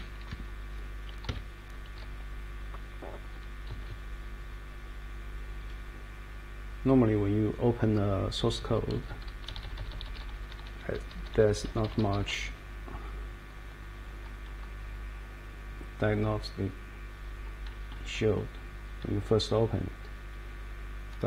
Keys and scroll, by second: 0.0-0.2 typing, 1.3 Escape, 1.7 Page_Up, 1.8 Page_Up, 2.0-3.2 Page_Up, 3.7 Page_Down, 4.4 Page_Down, 5.6 Page_Down, 6.3 Page_Down, 7.8 Page_Down, 8.6 Page_Down, 9.1 Page_Down, 9.5 Page_Up, 10.0 Page_Up, 10.6 Page_Up, 11.2 Page_Up, 11.7 Page_Down.